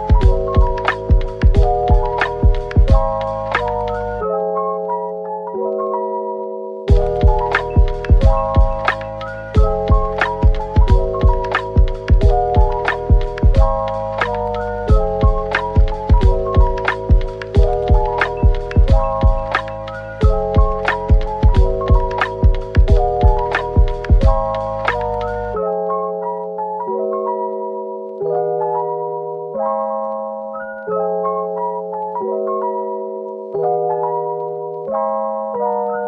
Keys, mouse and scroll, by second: 0.0-1.5 typing, 2.5 middle click, 3.0 scroll up 1, 4.3-5.6 typing, 8.8-9.7 typing, 10.0 middle click, 10.8-12.0 typing, 13.3 shift+click, 13.9-15.1 typing, 16.1 double click, 16.5-17.5 scroll down 1, 18.8 middle click, 24.1 typing, 26.5-27.2 typing, 29.6 Tab, 29.9-31.2 typing, 33.4-34.3 typing, 35.5 middle click.